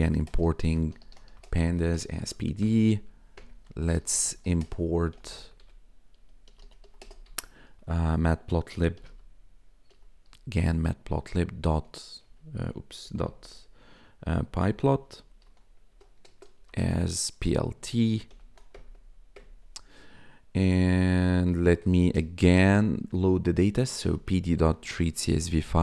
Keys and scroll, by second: 0.0-2.6 typing, 3.6-5.1 typing, 6.2-7.3 typing, 8.7-9.9 typing, 10.9 Down, 11.2 Tab, 11.5 /, 12.2 BackSpace, 13.0 ., 14.6-18.3 typing, 15.9 Tab, 18.7 Return, 21.2-25.8 typing, 25.7 Tab.